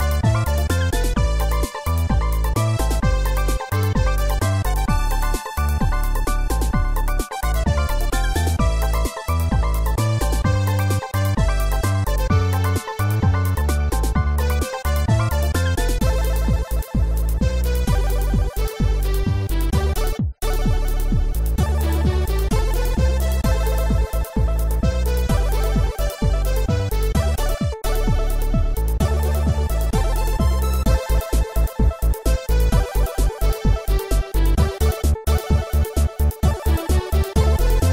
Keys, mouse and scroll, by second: 32.0 middle click, 32.6 scroll up 2, 34.6 typing, 35.3 Return, 37.1 click.